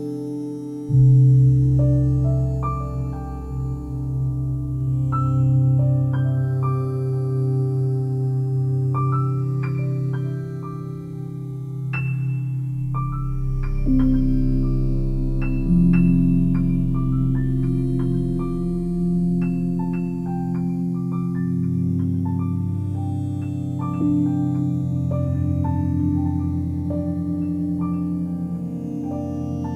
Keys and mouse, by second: 0.3 z, 2.1 Escape, 2.9-8.9 alt+drag, 3.7 ctrl+z, 9.0 alt+click, 10.1-13.4 drag, 14.0 alt+shift+click, 14.3 shift+click, 14.6 alt+click, 15.9 g, 16.0 g, 16.8 click, 17.1-19.0 alt+drag, 19.6 click, 19.9 shift+click, 20.3 shift+click, 20.6 shift+click, 21.5 g, 21.7 g, 22.9 click, 23.7 s, 24.6 click, 24.8-29.2 alt+drag.